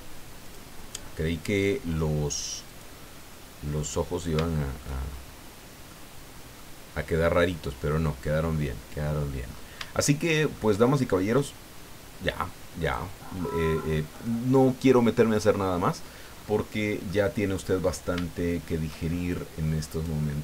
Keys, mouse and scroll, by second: 0.4 click, 2.7 click, 4.4-5.0 shift+middle drag, 5.0-5.4 shift+scroll up 1, 5.9-6.7 middle drag, 6.9-8.3 scroll down 2, 8.5-9.4 middle drag, 10.0-10.7 shift+middle drag, 11.3 click, 12.9 click, 13.9 scroll down 2, 14.3-15.0 middle drag, 16.3 scroll up 2, 17.1-17.9 middle drag, 18.2 shift+middle click, 19.4 scroll up 2, 19.9 right click.